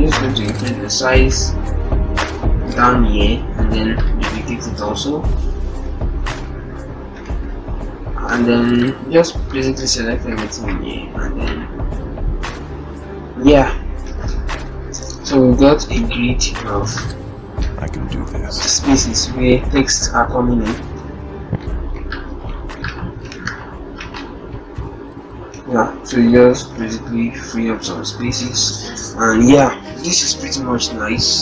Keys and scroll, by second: 10.0 ctrl+t, 26.2 ctrl+-, 26.4 ctrl+0.